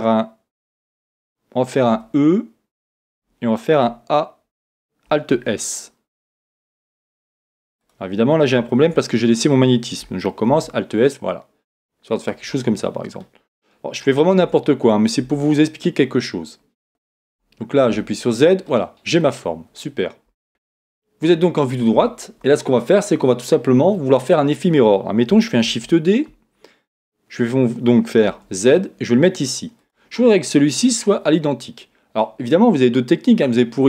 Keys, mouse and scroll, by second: 1.9 e, 5.3 alt+s, 7.9 click, 8.7 shift+Tab, 10.5 alt+s, 12.3 click, 12.6-13.7 middle drag, 13.9 middle click, 14.4 Tab, 15.2 Tab, 16.9 Tab, 17.2 Tab, 17.9 z, 18.7-20.5 middle drag, 20.3 Tab, 25.6 shift+d, 29.9 click.